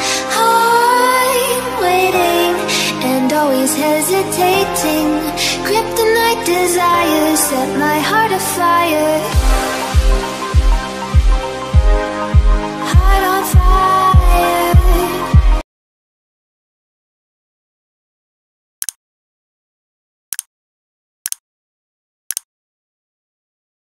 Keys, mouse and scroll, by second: 0.0 click, 1.0 click, 3.6 click, 3.8 click, 4.0 click, 6.7 click, 8.0 x, 9.4 c, 9.8 click, 14.0 click.